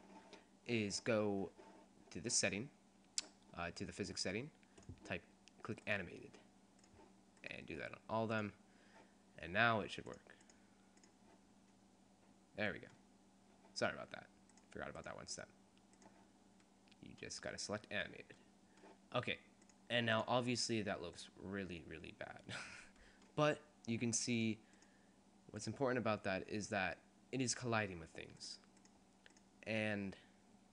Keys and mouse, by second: 0.5-1.7 middle drag, 3.4-4.9 middle drag, 4.9 click, 5.9 right click, 6.7 middle click, 6.9 right click, 9.3-11.9 drag, 12.1 middle click, 12.7 middle click, 14.8 click, 17.6 click, 18.4 click, 19.6 click, 24.6 click, 28.6-30.7 drag.